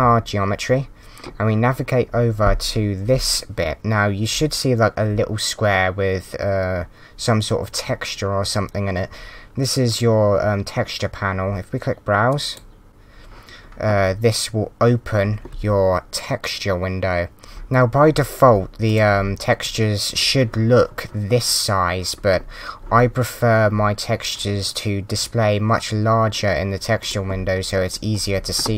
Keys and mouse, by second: 12.8 click, 17.4 click, 18.8 click, 27.0 click.